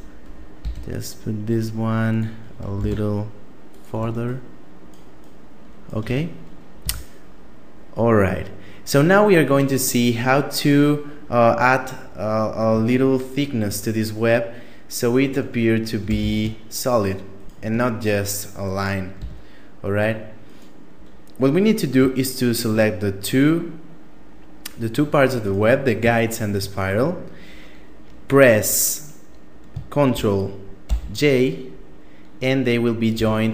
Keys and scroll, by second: 0.0 s, 2.2 g, 5.5 Tab, 6.3 a, 15.5 g, 15.6 z, 18.6 a, 30.3 ctrl+j, 32.5 a, 33.4 Tab.